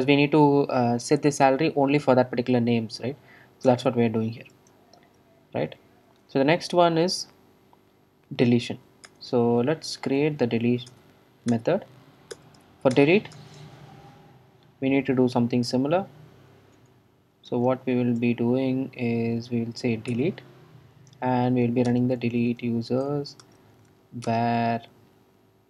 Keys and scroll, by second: 9.2 super+Return, 10.4 super+z, 10.9 super+z, 11.0 alt+Return, 13.0 Return, 16.8 Return, 16.8 Tab, 20.1 Tab, 20.1 Return.